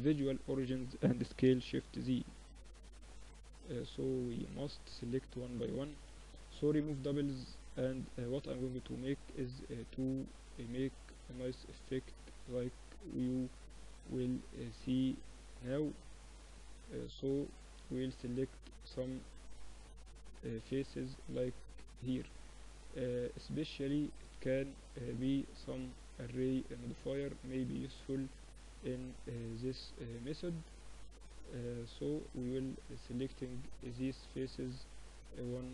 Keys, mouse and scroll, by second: 0.3 s, 4.1 ctrl+z, 4.9 a, 5.1 a, 5.3 w, 7.8 click, 8.4 middle click, 8.6-9.6 drag, 8.6-22.8 right drag, 22.8 middle click, 23.2-35.7 right drag.